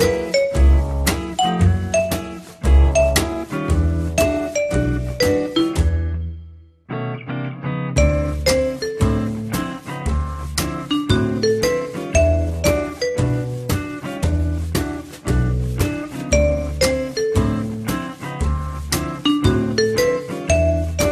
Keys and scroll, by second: 10.2 t, 17.7 f.